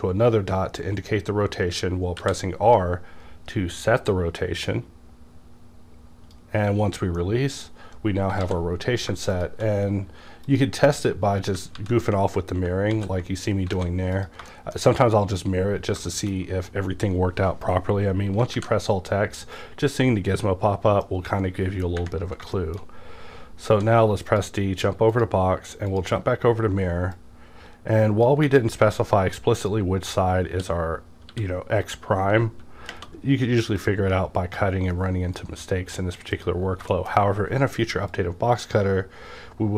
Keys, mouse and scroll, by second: 2.2 r, 7.2-9.3 middle drag, 8.4 alt+x, 9.3 shift+click, 10.5 shift+click, 11.7 ctrl+z, 12.9 ctrl+z, 13.9 alt+a, 14.1 click, 14.5 shift+middle click, 16.1 shift+middle click, 18.5 alt+x, 19.4-23.7 middle drag, 23.7 d, 24.3 click, 25.1-30.5 drag, 30.5 w, 31.3-32.9 drag, 31.3 w, 32.2 g, 33.8 click, 33.8-36.9 drag, 36.9 shift+middle click, 37.1 shift+scroll down 1, 37.2-38.0 scroll up 1, 38.0 scroll up 1, 38.1-39.7 drag.